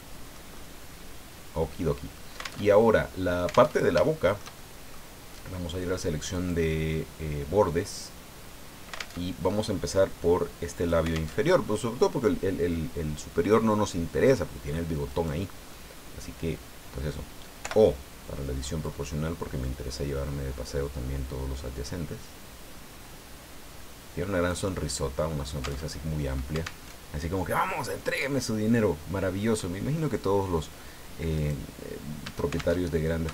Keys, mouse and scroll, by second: 2.6 alt+Tab, 3.7 alt+Tab, 4.0-5.1 alt+shift+drag, 6.3 click, 6.9-7.2 scroll up 1, 9.2 alt+Tab, 11.3 alt+Tab, 15.1 right click, 15.7-17.2 middle drag, 17.6 o, 18.8-24.7 drag, 24.8 middle click, 25.8 alt+Tab, 26.8 alt+Tab, 31.3 right click, 32.7 alt+shift+Tab.